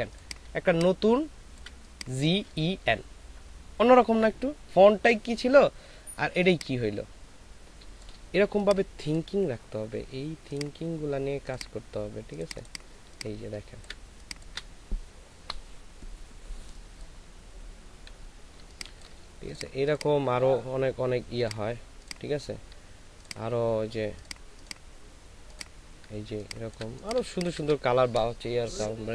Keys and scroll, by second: 0.4 ctrl+alt+space, 6.4 ctrl+space, 12.9 ctrl+alt+space, 18.6 ctrl+space, 26.3 ctrl+alt+space.